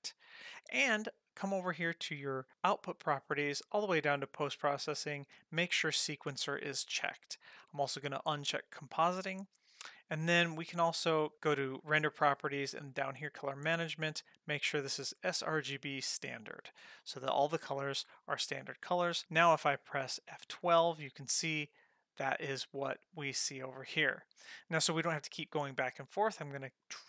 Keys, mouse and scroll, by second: 2.5 click, 3.9 click, 4.6-7.0 scroll down 3, 8.3 click, 10.3 click, 13.1 click, 13.8-15.1 scroll down 1, 15.1-16.2 scroll down 1, 20.6 F12, 23.0 click, 25.1 click, 26.8 click.